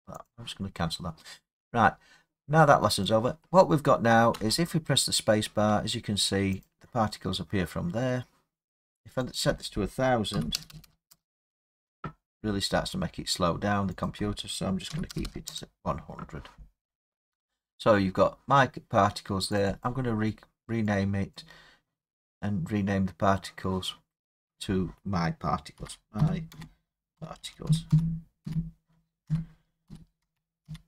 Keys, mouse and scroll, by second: 0.2 click, 1.3 scroll, 3.0 click, 3.4 scroll, 4.3 space, 6.6 click, 9.3 click, 10.3 typing, 11.1 Return, 14.0 click, 14.0-16.7 typing, 17.7 middle click, 19.6 click, 19.8 click, 21.3 click, 25.7-30.6 typing.